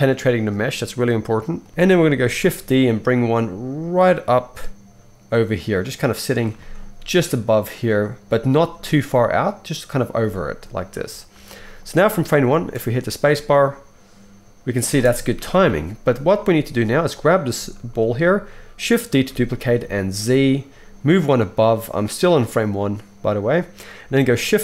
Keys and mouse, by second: 1.5-6.9 middle drag, 1.7 KP_1, 2.6 shift+d, 8.7 g, 8.8-10.1 middle drag, 11.3-11.8 shift+middle drag, 12.2-17.1 middle drag, 12.5 space, 14.9 space, 15.4 shift+Left, 17.1 click, 17.2-24.6 middle drag, 19.1 shift+d.